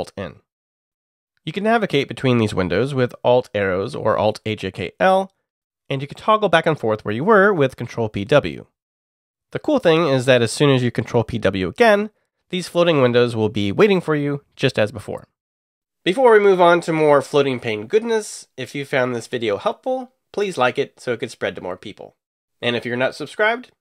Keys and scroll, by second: 2.7 alt+Up, 3.1 alt+Up, 3.5 alt+Down, 3.9 alt+Down, 8.1 ctrl+p, 8.8 w, 10.0 ctrl+p, 11.0 w.